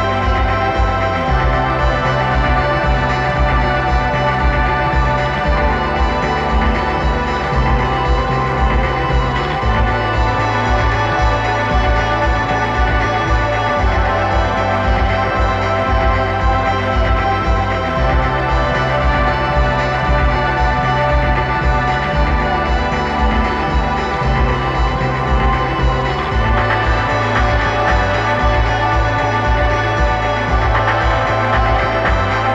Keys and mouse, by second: 3.7 click, 6.5 click, 7.6-9.4 drag, 14.6-15.6 drag, 16.3 middle click, 16.6-18.3 drag, 17.5 ctrl+z, 20.9 ctrl+z, 22.6 ctrl+z, 24.8 ctrl+z, 28.7 ctrl+z, 30.0 ctrl+z.